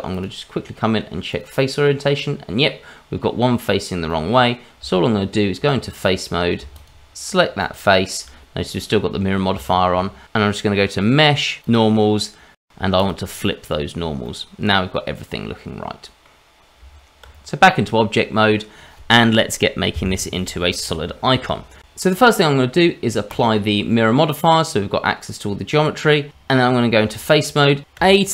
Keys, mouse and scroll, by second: 0.1 click, 2.2 middle click, 4.1 middle click, 4.8 Tab, 6.7 shift+click, 7.6 shift+click, 9.6 shift+middle click, 11.0 click, 14.2 middle click, 16.8 Tab, 17.6 middle click, 23.2 click, 27.9 Tab, 27.9 a.